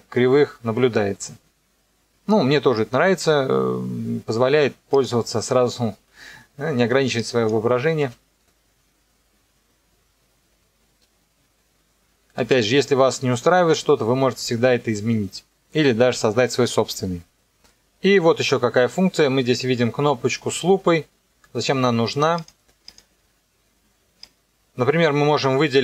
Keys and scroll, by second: 8.0 KP_0, 12.3 space.